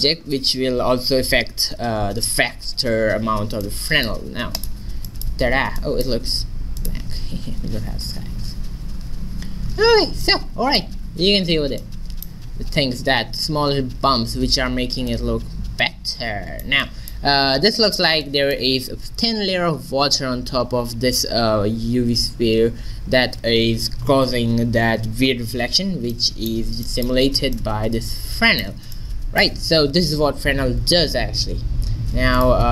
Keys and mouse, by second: 4.7 click, 5.5 click, 5.9 click, 6.2-8.5 drag, 10.3-11.9 middle drag, 26.2 middle click, 27.6-29.3 drag, 29.3-30.7 middle drag, 32.4-32.7 drag.